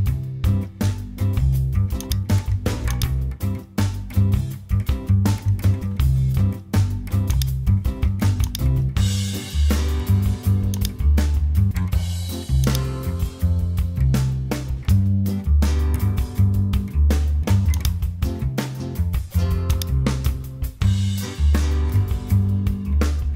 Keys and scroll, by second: 0.9 super+j, 4.5 super+t, 14.8 Return.